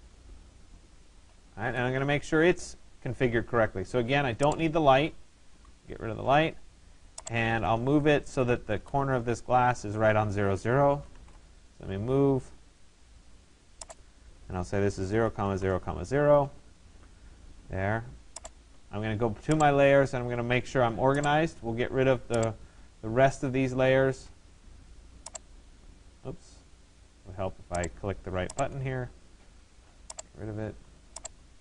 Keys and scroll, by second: 5.1 Delete, 10.9 Return, 14.8 0, 16.4 Return.